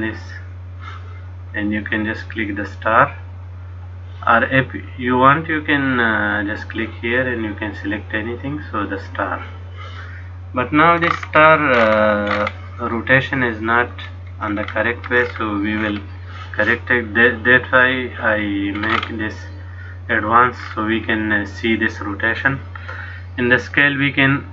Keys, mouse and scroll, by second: 0.1 click, 6.1 click, 11.2-11.7 scroll up 1, 12.0-14.2 scroll up 17, 13.0 middle click, 14.2-16.7 scroll down 20, 18.9-20.6 scroll up 6, 20.7-21.7 scroll down 4, 23.8 click.